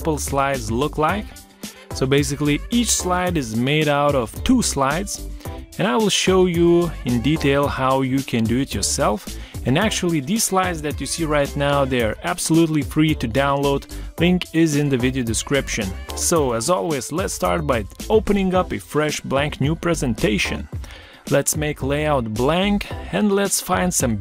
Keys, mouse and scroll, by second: 0.1 ctrl+scroll down 1, 4.9 shift+click, 11.1 ctrl+z.